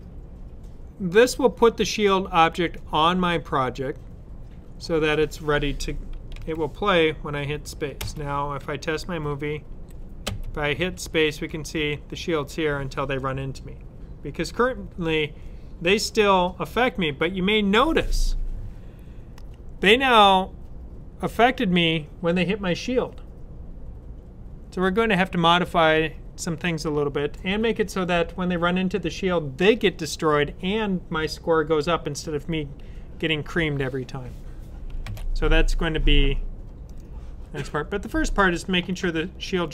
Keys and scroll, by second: 6.2 super+s, 34.9 super+w.